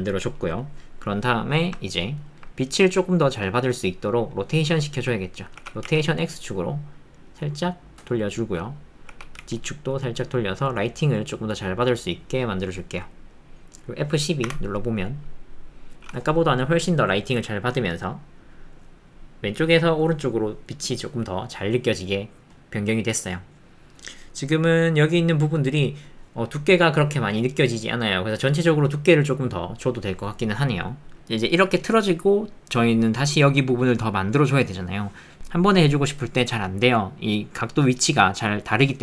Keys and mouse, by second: 1.8 ctrl+middle click, 2.2 ctrl+middle click, 2.6 middle click, 3.2 shift+middle click, 4.1 middle click, 4.5 alt+middle click, 8.5 middle click, 9.4 z, 13.0 click, 30.7 middle click, 31.5 middle click, 34.5 middle click, 37.2 middle click.